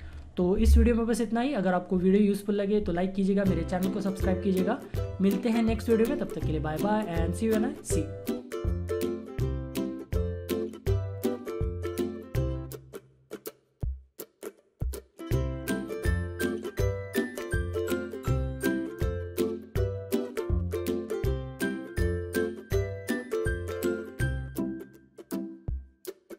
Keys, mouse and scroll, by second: 0.0 shift+F4.